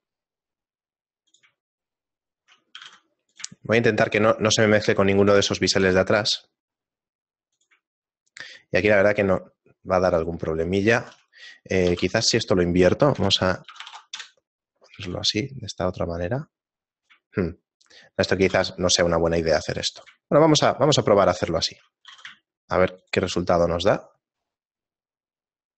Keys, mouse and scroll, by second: 1.7 shift+middle click, 2.7 g, 3.4 shift+click, 3.6 shift+middle click, 5.1 g, 8.0 shift+middle click, 12.1 r, 14.9 g, 17.3 shift+middle click, 18.4 g, 20.3 shift+middle click, 22.1 g, 23.3 shift+middle click.